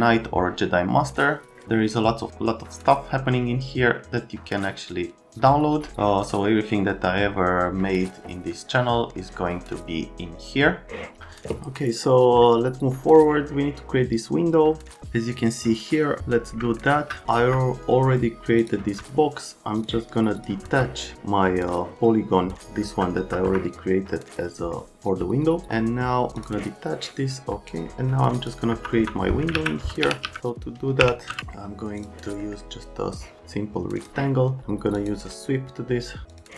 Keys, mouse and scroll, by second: 16.9 F3, 17.4 F3, 18.6 click, 20.6 F3, 23.2 F3, 28.7 F3, 29.0 F3, 29.5 alt+q, 29.8-31.3 typing, 32.0 click, 32.4 right click, 33.1 click, 35.0 click, 36.3 click.